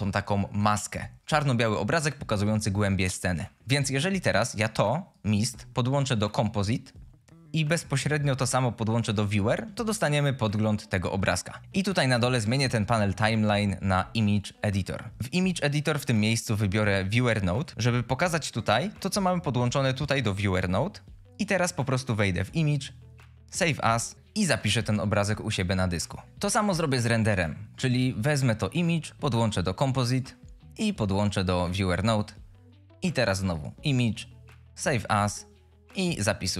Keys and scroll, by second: 3.6 shift+a, 18.9 F22.